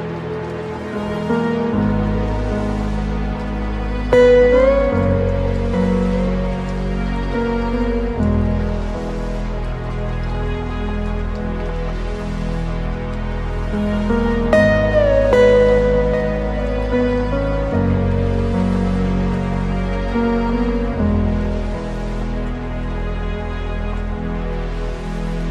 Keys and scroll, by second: 7.2 ctrl+alt+space, 11.3 ctrl+i, 12.2 ctrl+space, 14.2 ctrl+z, 21.8 ctrl+alt+space, 23.6 ctrl+0.